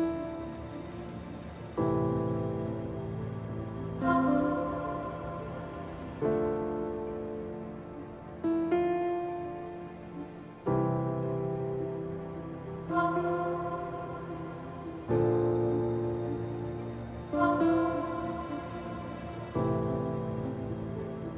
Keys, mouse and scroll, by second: 0.4-1.6 middle drag, 3.1 KP_0, 4.0 click, 6.1 click.